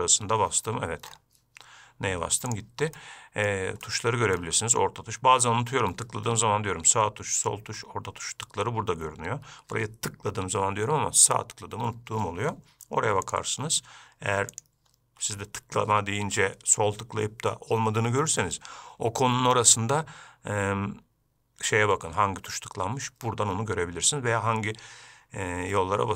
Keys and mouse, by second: 0.0 n, 3.2 middle click, 4.1 middle click, 14.8-15.4 shift+drag.